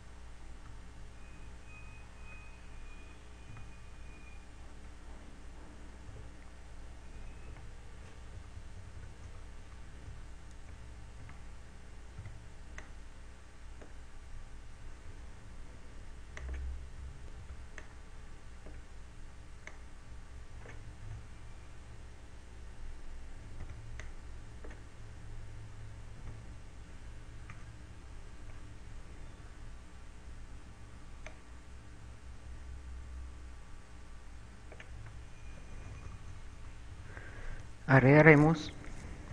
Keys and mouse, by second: 0.0 q, 1.0 Tab, 1.9 z, 3.2 z, 4.0 a, 7.6 Tab, 9.0-11.6 typing, 12.7 a, 13.7 b, 17.4 click, 18.6 b, 21.3 click, 22.3 a, 25.1 b, 27.3 z, 28.5 KP_7, 32.5 click, 36.5-38.7 typing.